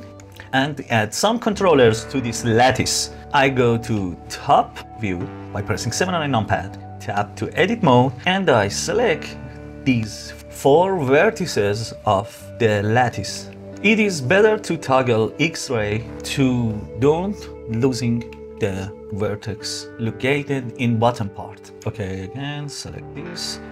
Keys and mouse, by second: 4.2 KP_7, 6.3 Tab, 7.9 click, 8.5-10.4 middle drag, 13.3 middle click, 16.7 middle click, 20.9 KP_7, 21.5 click.